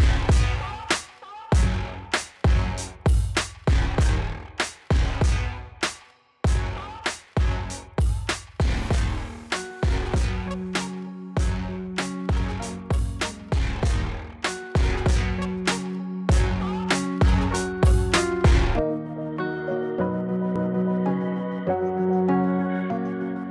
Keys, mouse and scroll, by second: 0.0-0.2 typing, 0.9-4.9 drag, 1.7-2.9 drag, 4.9-5.4 scroll down 1, 6.4 click, 7.7 Return, 9.6 click, 11.3 space, 15.9 space, 16.5-17.0 drag, 21.7-23.5 typing.